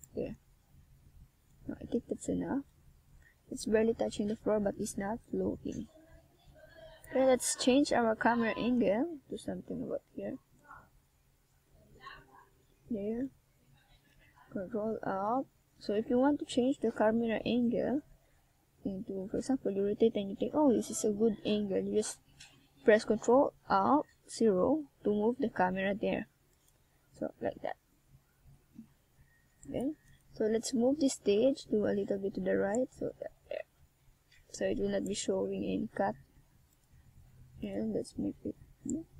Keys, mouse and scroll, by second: 0.3 click, 1.6 right click, 2.1 shift+right click, 2.5 right click, 2.7 middle click, 3.5 shift+right click, 3.8 shift+right click, 4.2 shift+right click, 5.1 KP_1, 6.0 click, 7.1 right click, 7.6 click, 9.0 right click, 9.3 middle click, 10.1 shift+right click, 10.7 click, 11.7 Tab, 12.3 Tab, 12.6 right click, 13.0 right click, 13.7 middle click, 14.8 KP_1, 16.2 click, 17.8 a, 18.4 right click, 18.7 a, 19.0 z, 21.7 c, 23.7 middle click, 25.4 KP_1, 26.7 click, 29.2 a, 29.3 c, 30.2 click, 33.1 a, 33.7 Tab, 34.2 z, 34.9 middle click, 37.2 click, 38.6 click.